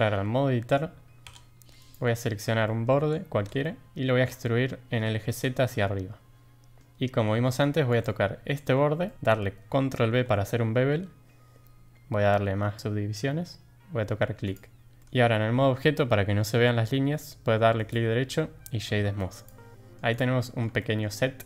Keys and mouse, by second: 1.2 2, 2.2 middle click, 2.6 shift+click, 3.6 middle click, 3.9 e, 7.9 click, 9.0 middle click, 9.9 ctrl+b, 15.0 middle click, 15.0 Tab, 17.7-19.4 drag, 19.9 middle click, 20.1 click, 20.3 middle drag, 20.8 shift+middle drag, 21.3-21.4 middle drag.